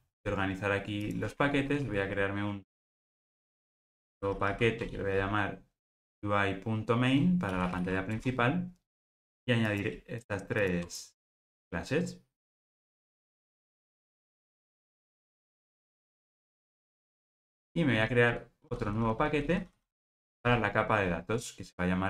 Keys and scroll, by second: 1.8 super+n.